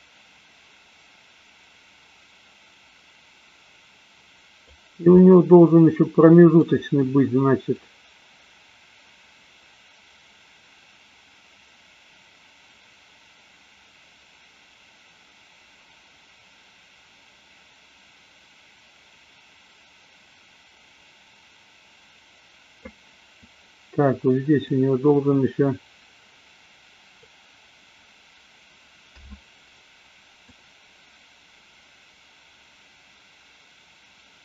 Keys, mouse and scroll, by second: 5.1-6.5 middle drag, 8.0-23.1 drag, 24.5-27.3 drag, 29.1 a, 30.6-34.4 drag.